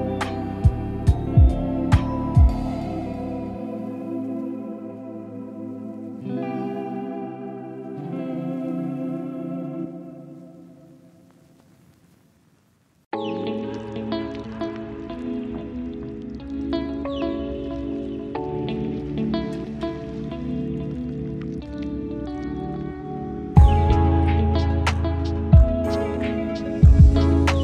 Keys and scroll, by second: 3.2 ctrl+j, 5.0 ctrl+j, 7.5 ctrl+j, 9.7 ctrl+j, 10.9 ctrl+j, 23.8 5, 25.4 4, 26.8 3.